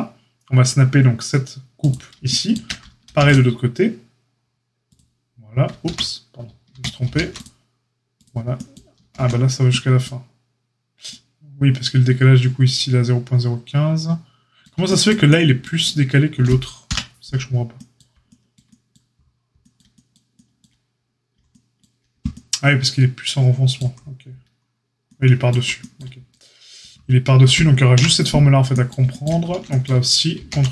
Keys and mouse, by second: 1.9-30.7 shift+middle drag, 3.0 ctrl+r, 5.8 ctrl+e, 6.6 ctrl+z, 7.0 ctrl+r, 8.9 ctrl+z, 16.8 KP_Divide, 27.9 KP_Divide, 30.3 ctrl+r.